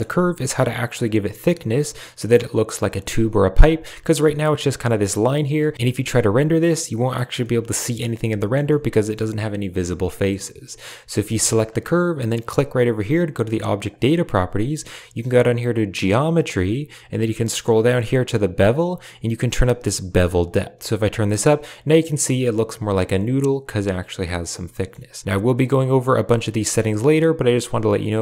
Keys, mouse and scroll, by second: 1.4 middle click, 2.9-3.5 middle drag, 4.6 a, 5.5 click, 7.3-8.1 middle drag, 8.3 shift+middle click, 8.6-9.0 middle drag, 9.7-10.2 middle drag, 11.2 g, 13.8 click, 16.0 click, 19.9-22.0 drag, 22.3-24.4 middle drag, 24.6 middle click, 28.0-28.2 shift+drag.